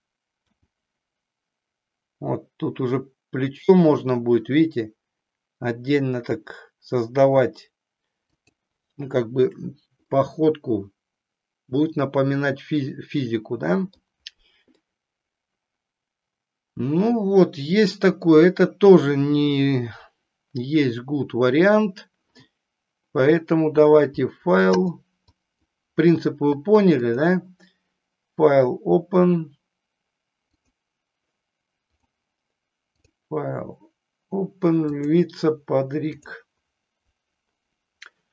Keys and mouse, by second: 0.9 g, 8.4 click, 10.1-14.1 middle drag, 14.9-18.7 middle drag, 24.7 click, 27.0-32.0 drag, 32.9-36.7 drag.